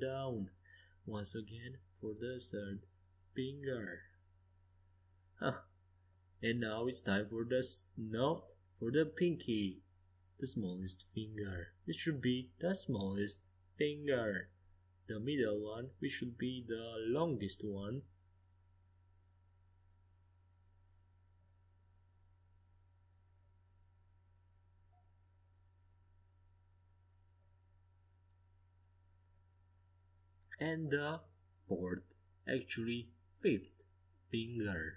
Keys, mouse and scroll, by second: 0.1-1.8 drag, 1.7-3.5 right drag, 2.1 e, 3.5 click, 4.4 right click, 4.4 s, 5.2 click, 6.7-8.6 middle drag, 8.6-11.2 right drag, 9.2 e, 10.1 s, 11.9-15.4 drag, 15.4-17.9 right drag, 16.0 e, 20.5 s, 22.2-23.9 drag, 24.3-29.3 drag, 27.3-29.3 middle drag, 29.5-31.1 right drag, 30.0-32.1 middle drag, 30.5 e, 31.5 s, 32.8-34.7 drag, 34.4 s.